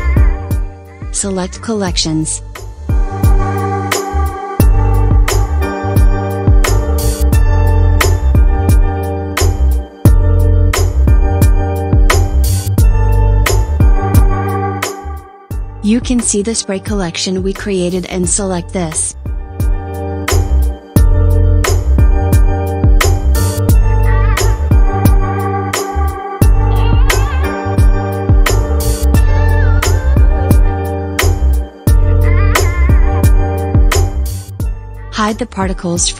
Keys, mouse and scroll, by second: 15.5-18.8 drag, 24.7-27.9 middle drag, 27.9-32.6 drag.